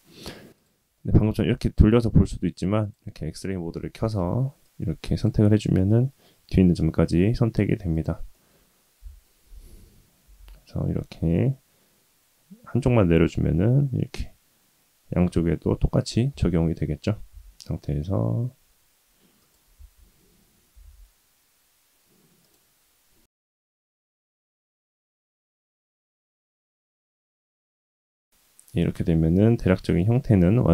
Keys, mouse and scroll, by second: 0.5 click, 0.9-2.2 middle drag, 2.8 click, 3.8 KP_1, 4.6 click, 5.5 middle click, 7.0 middle click, 7.9 click, 8.3 middle click, 9.0 KP_1, 9.7-10.2 scroll up 1, 10.2 g, 16.3 Tab, 17.1 s, 19.7 Tab, 20.7 g, 23.6 g, 26.2 Tab, 26.7-27.2 scroll down 1, 27.2-30.5 middle drag.